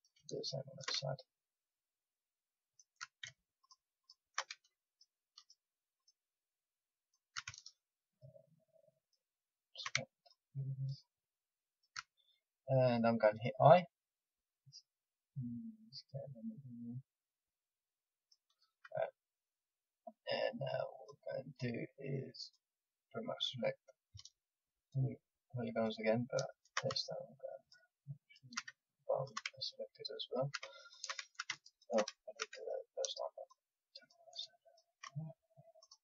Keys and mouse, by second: 12.1-13.6 middle drag, 13.6 i, 18.5-20.9 middle drag, 20.9-36.0 drag.